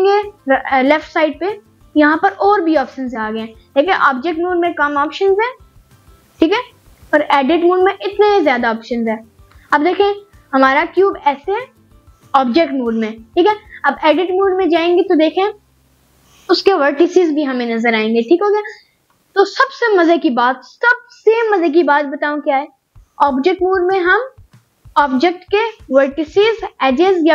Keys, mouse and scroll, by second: 2.1 Tab, 13.5 click.